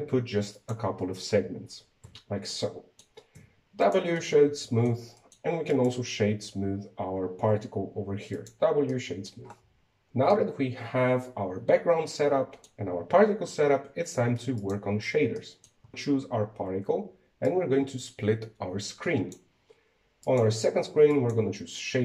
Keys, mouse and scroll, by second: 2.8 Tab, 3.3-4.1 middle drag, 4.1 w, 4.9-6.4 middle drag, 6.4 right click, 8.2 w, 9.6-10.1 middle drag, 10.1 scroll up 2, 11.1-14.1 middle drag, 15.9-16.3 scroll up 4, 16.3-18.2 shift+middle drag, 18.2-22.0 drag.